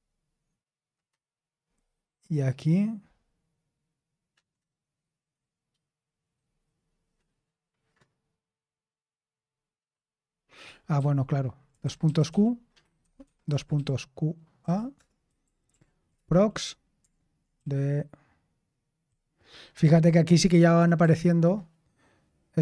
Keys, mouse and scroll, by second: 10.9 click, 10.9-14.5 typing, 13.1 Escape, 13.2 Escape, 14.9 Return, 15.4 ctrl+p, 15.6 ctrl+p, 16.1 Return, 17.5-18.9 typing, 20.9 d.